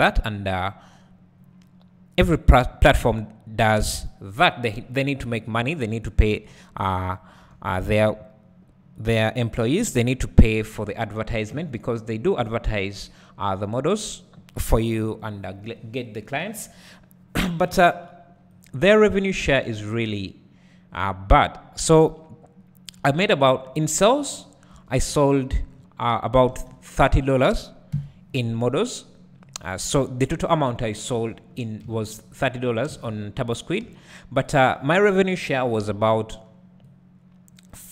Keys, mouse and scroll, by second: 0.3-1.0 scroll down 1, 1.0-2.3 scroll up 1, 7.1 x, 7.5 1, 9.7 KP_Decimal, 10.4 `, 12.8-32.7 drag, 24.7 Tab, 25.0-27.1 scroll down 2, 27.1-27.9 scroll down 1, 27.9 KP_1, 31.1 Tab, 32.6 z, 32.9 alt+a, 35.3 b, 36.8-37.9 drag.